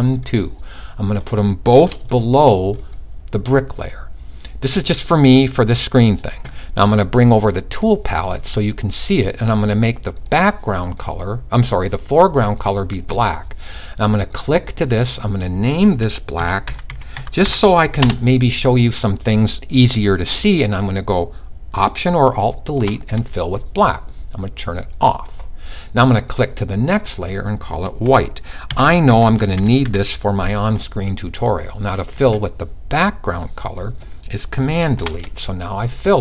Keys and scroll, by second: 15.9-17.0 typing, 28.3-29.4 typing.